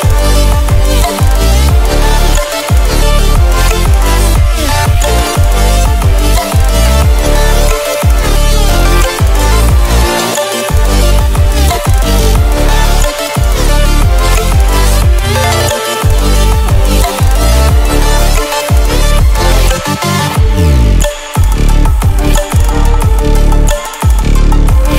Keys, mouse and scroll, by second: 0.7-1.1 ctrl+alt+scroll down 1, 1.1 ctrl+alt+scroll up 1, 3.1 click, 8.9 ctrl+alt+scroll down 1, 9.2 ctrl+alt+scroll up 1, 11.3 click, 12.5-12.9 scroll down 1, 15.0-19.1 drag.